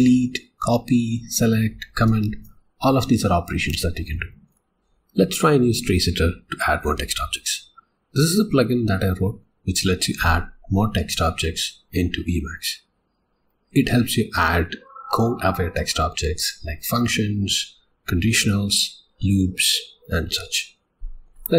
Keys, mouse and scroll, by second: 21.0 click.